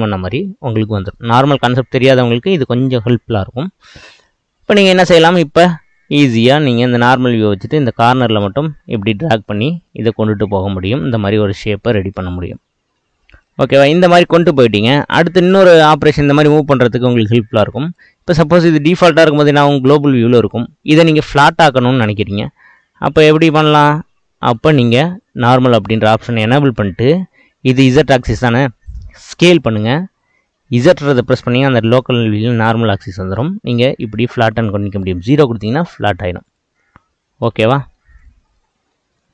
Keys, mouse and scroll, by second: 1.2-6.4 middle drag, 6.5-7.7 drag, 9.5-9.9 scroll down 1, 9.9-16.5 middle drag, 16.5 click, 18.9-20.2 drag, 20.2-24.5 middle drag, 24.5-25.9 drag, 25.9-29.1 middle drag, 29.3 s, 36.8-38.2 middle drag, 38.2 click, 38.5-39.3 middle drag.